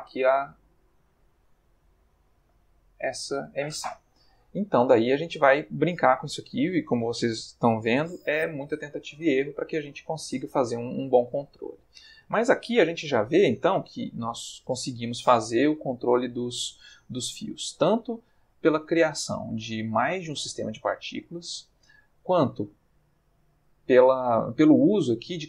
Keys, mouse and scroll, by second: 4.2-5.1 middle drag, 5.2-6.4 middle drag, 16.7-17.3 middle drag, 20.8-21.8 middle drag, 22.6-23.3 ctrl+middle drag.